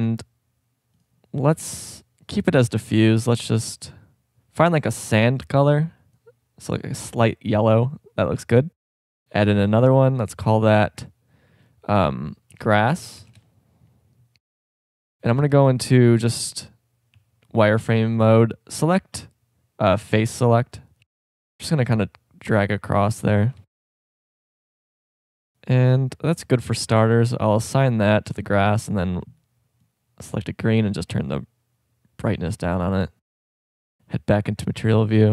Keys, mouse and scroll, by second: 1.0-2.5 drag, 8.8 drag, 13.2 s, 14.2 middle click, 14.8 Tab, 15.4 z, 17.1 a, 17.6 b, 19.9-22.0 drag, 21.0 b, 23.6 z, 23.9 middle click, 26.5 click, 28.7-30.8 drag, 33.4-33.9 drag, 34.1 click, 34.5 middle click, 34.8 Tab.